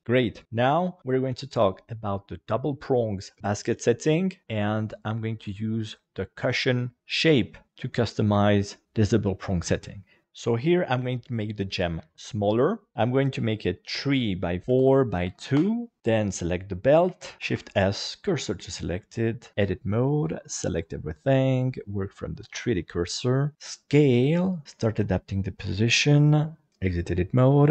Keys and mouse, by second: 11.9 s, 13.8 click, 14.4 click, 15.0 click, 16.3 right click, 17.0 KP_1, 17.4 shift+s, 19.4 Tab, 20.2 a, 20.4 middle click, 21.7 click, 23.5 s, 24.5 click, 24.6 alt+z, 24.7 click, 26.7 Tab.